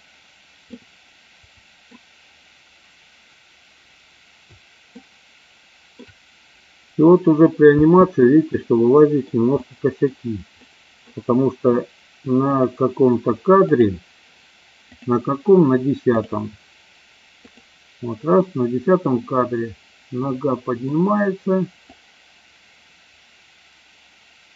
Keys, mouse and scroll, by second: 0.6-1.8 middle drag, 4.8-5.9 shift+middle drag, 7.7 space, 8.6-9.1 middle drag, 9.6-10.0 middle drag, 10.6-11.0 middle drag, 12.4 click, 14.9-16.4 drag, 17.5 click, 18.4-21.4 middle drag, 22.1-24.5 drag.